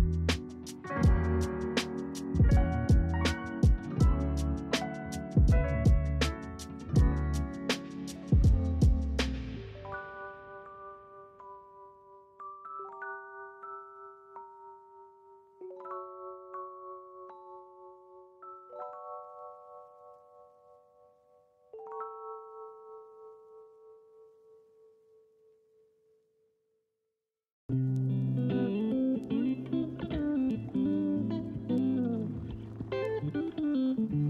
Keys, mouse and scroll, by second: 0.1 click, 1.2 shift+click, 1.9 shift+click, 2.6 click, 3.0-4.7 middle drag, 4.7-5.1 scroll up 3, 5.1 click, 5.3 click, 6.0 click, 6.5 s, 7.4 s, 7.5 s, 7.5 s, 7.9 click, 8.1 click, 8.6 click, 9.1 click, 9.3 click, 10.1-10.9 middle drag, 10.9 click, 11.3 click, 11.6 click, 12.2 s, 15.1 click, 15.4-16.5 scroll down 4, 16.5 KP_0, 17.9-20.3 shift+middle drag, 20.3-20.6 scroll up 1, 20.6-24.5 shift+middle drag, 25.2 shift+middle click, 25.6 scroll up 1, 25.8-26.5 scroll down 2, 26.5-31.0 middle drag, 31.0 ctrl+s.